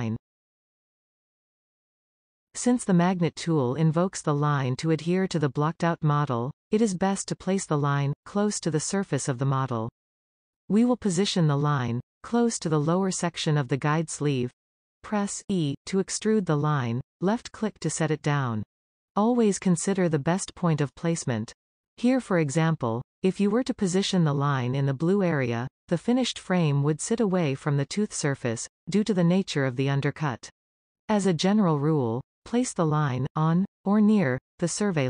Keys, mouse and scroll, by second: 8.1-10.5 middle drag, 10.9 e, 13.1 scroll up 1, 13.4-14.9 shift+middle drag, 15.1 e, 25.8-27.8 middle drag, 27.8-28.6 scroll up 1, 28.6 middle click, 29.3-30.1 scroll down 1, 30.1-30.6 scroll down 1, 30.6-31.6 middle drag, 31.6 g, 34.0-35.0 middle drag.